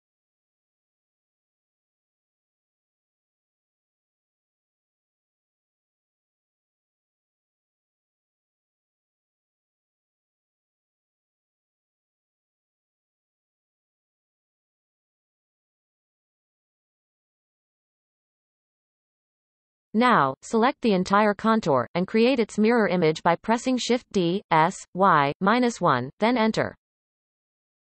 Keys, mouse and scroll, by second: 0.1 scroll up 1, 0.7 scroll up 2, 0.7 ctrl+KP_Add, 0.9 ctrl+KP_Add, 1.1 ctrl+KP_Add, 1.4 ctrl+KP_Add, 2.0-2.4 scroll down 3, 3.2 ctrl+z, 3.4 ctrl+z, 5.1 x, 6.7 click, 7.2-7.8 scroll up 7, 8.3 ctrl+KP_Add, 9.0 x, 9.6-10.0 scroll down 4, 10.0 scroll up 7, 10.3 click, 10.4 g, 10.6-10.9 scroll down 15, 10.9 shift+middle click, 11.2 scroll up 3, 11.3 click, 11.4-12.5 ctrl+KP_Add, 12.1 shift+middle click, 12.3 ctrl+KP_Add, 12.8 ctrl+z, 12.9 x, 13.1 click, 13.3 ctrl+KP_Add, 13.6 x, 13.8 scroll down 10, 14.0 shift+middle click, 14.1 scroll up 4, 14.2 click, 14.3-15.4 ctrl+KP_Add, 14.7 shift+middle click, 14.8 ctrl+KP_Add, 15.7 x, 15.8 scroll up 3, 15.9 shift+middle click, 16.1 click, 16.2 x, 16.4 shift+middle click, 16.6-16.9 scroll down 13, 17.0 shift+middle click, 17.4 click, 18.1 scroll up 3, 18.3 click, 18.5 g, 19.2 scroll down 1, 19.5-20.3 shift+middle drag, 20.3 alt+shift+click, 23.9 shift+d, 24.7 s, 25.8 middle click.